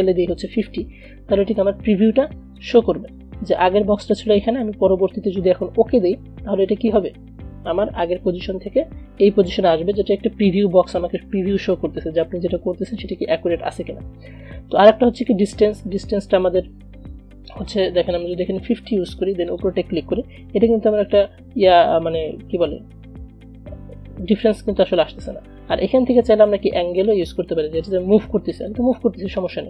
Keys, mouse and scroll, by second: 2.7 click, 16.3-19.6 drag, 25.0-28.9 drag.